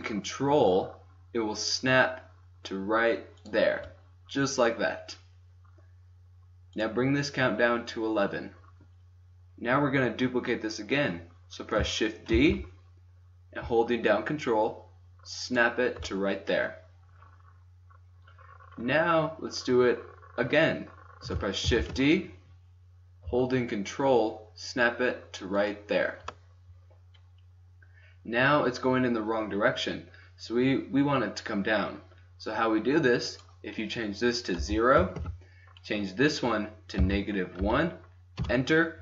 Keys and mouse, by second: 6.6-8.6 drag, 12.3 shift+d, 14.5 click, 21.8 shift+d, 33.3-35.2 drag, 35.2 Tab.